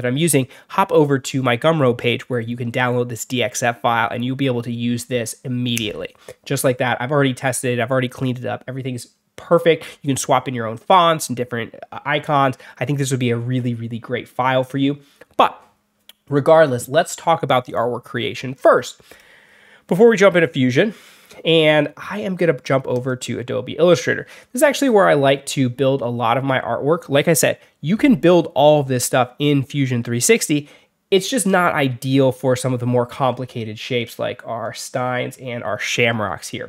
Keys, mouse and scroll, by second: 0.0 click, 0.6 click, 22.8 click, 25.0-25.4 alt+scroll down 4, 25.7-26.0 alt+scroll up 4, 26.4 alt+scroll down 2, 34.6 alt+middle click.